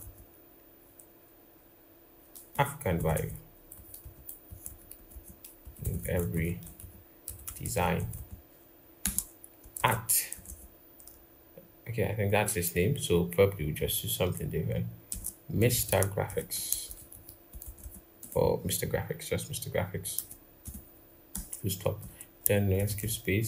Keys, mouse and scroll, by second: 2.7-5.3 typing, 7.9 typing, 8.8 Return, 9.5-10.1 typing, 14.8-17.4 typing, 19.9 typing, 21.1 Return, 21.7 Return, 22.5-23.4 typing.